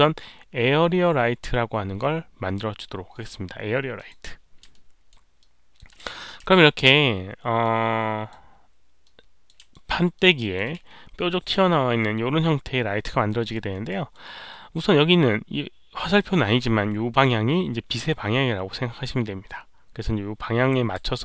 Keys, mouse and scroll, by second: 3.9 click, 4.7 alt+right click, 5.3 alt+click, 6.4 alt+w, 6.4 alt+right click, 6.5-6.8 alt+drag, 6.6 alt+w, 6.6 alt+right click, 7.6-8.2 alt+drag, 9.0-9.4 alt+drag, 9.0 w, 9.7 alt+middle drag, 10.1-10.5 alt+drag, 10.8 q, 11.6-13.5 alt+drag, 13.7 alt+right click, 14.1 alt+middle click, 14.4-14.8 alt+drag, 21.0-21.2 alt+drag.